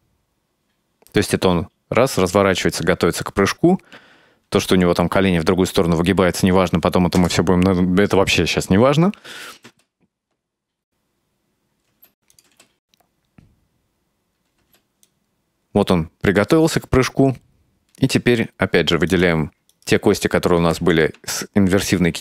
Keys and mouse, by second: 7.2 KP_0, 9.5 click, 9.7 space, 12.0 space, 12.4 click, 12.5 space, 14.7 space, 15.1-16.8 drag, 18.0 right click, 19.2 shift+right click, 19.8 shift+right click, 20.9 r.